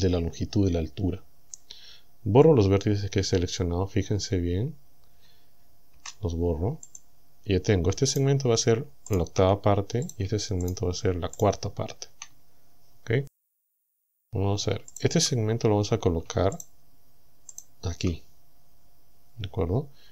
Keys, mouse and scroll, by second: 6.0 Delete, 6.9 click, 8.2 right click, 9.1 shift+right click, 10.1 shift+right click, 10.7 shift+right click, 11.4 shift+right click, 13.5 right click, 14.9 shift+right click, 16.6 shift+right click, 17.6 shift+right click.